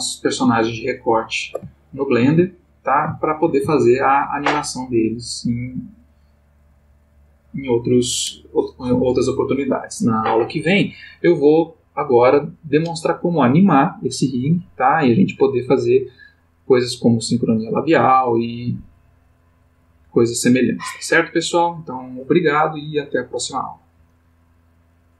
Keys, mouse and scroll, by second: 0.6 ctrl+middle click, 1.5 ctrl+shift+middle click, 1.7-4.2 ctrl+shift+middle drag, 25.1 click.